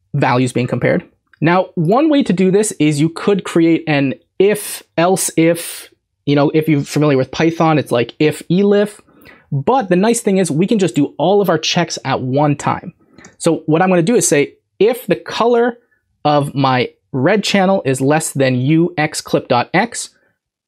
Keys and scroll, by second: 13.2 Left.